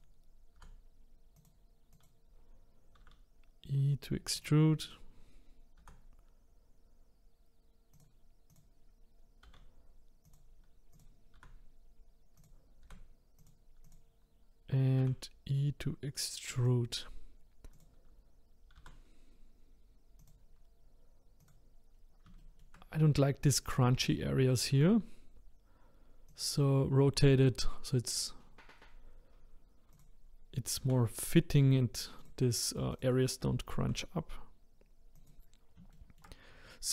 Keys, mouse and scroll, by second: 0.6 g, 1.9 click, 3.0 e, 4.8 click, 5.8 g, 8.5 click, 9.4 e, 10.9 click, 11.4 r, 12.8 g, 13.9 click, 15.0 e, 17.7 click, 18.7 r, 21.4 click, 21.9-22.4 scroll up 3, 22.4 shift+middle click, 22.9-24.7 scroll up 1, 24.7-26.3 scroll up 1, 26.3-26.9 scroll up 1, 26.9 scroll up 1, 27.0-28.1 scroll down 5, 29.9 click, 30.8 g, 32.9 click, 33.8 g, 35.9-36.9 shift+middle drag.